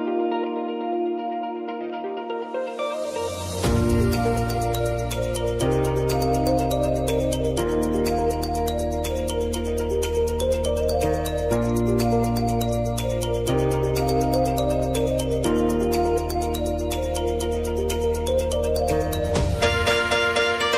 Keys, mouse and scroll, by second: 0.1 click, 0.5 space, 2.2-3.6 drag, 3.6 space, 5.3 click, 8.6-15.4 drag, 16.9-17.4 typing, 17.9-20.7 drag.